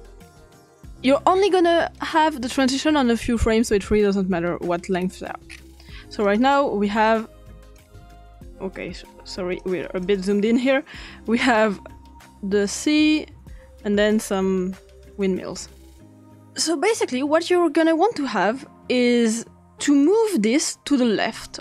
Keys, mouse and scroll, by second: 0.3-0.7 scroll up 1, 0.7 click, 1.9 click, 4.9-6.2 scroll up 2, 6.2 click, 6.2-7.0 scroll up 1, 7.0 click, 7.8 click, 9.6 click, 10.0 click, 11.5 click, 12.6 click, 14.1 click, 18.3 click, 19.5 click, 20.0 click.